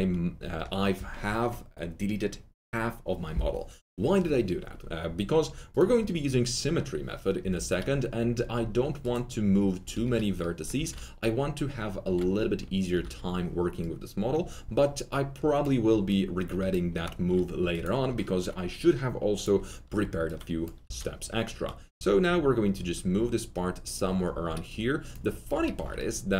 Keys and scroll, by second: 7.3 F3, 9.9 F3, 10.7 F3, 12.0 1, 12.9 F3, 20.8 F3, 25.3 F3, 25.3 1.